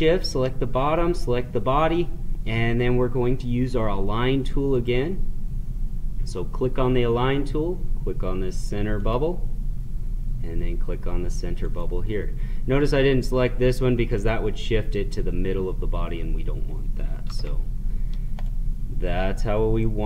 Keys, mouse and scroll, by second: 4.7 click, 9.1 click, 11.7 click, 14.1 click, 18.3 click.